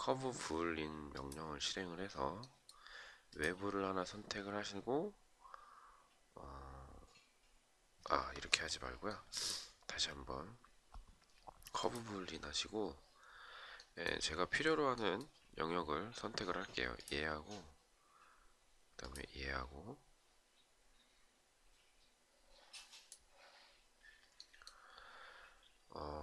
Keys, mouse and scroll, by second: 7.5 Escape.